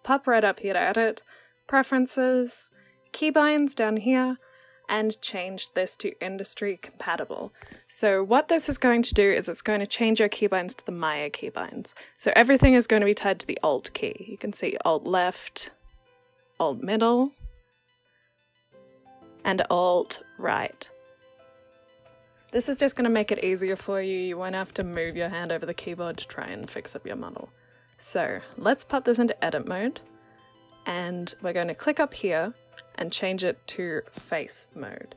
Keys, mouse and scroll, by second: 12.5-15.5 alt+drag, 15.8-18.8 alt+middle drag, 18.8-21.8 alt+right drag, 24.2-27.2 alt+drag, 28.3-31.3 drag.